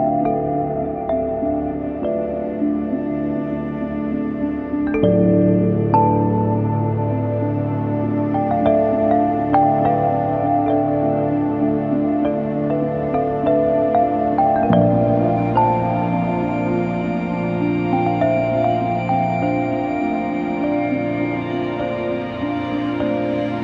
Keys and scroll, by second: 1.1 ctrl+shift+i, 9.2 ctrl+e, 19.0 ctrl+p.